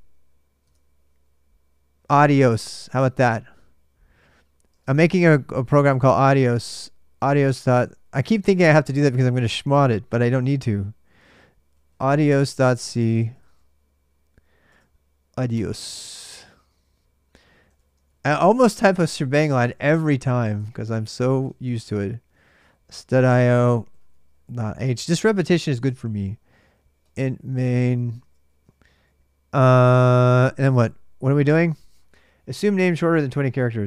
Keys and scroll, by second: 0.4 super+Tab, 4.5-8.0 typing, 10.6-15.3 typing, 17.3-29.2 typing, 30.5 super+Tab.